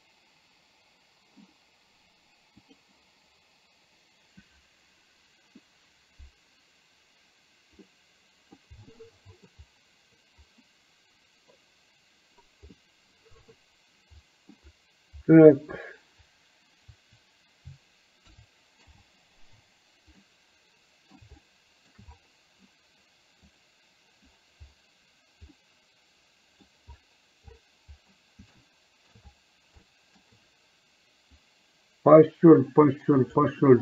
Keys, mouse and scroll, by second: 2.7 click, 7.9-8.6 middle drag, 9.1-9.6 middle drag, 12.8-14.6 middle drag, 18.9 space, 20.3-21.2 middle drag, 21.4 shift+middle click, 23.6 click, 25.7-26.8 middle drag, 28.8 shift+middle click, 30.1 shift+middle click, 31.4-33.6 drag.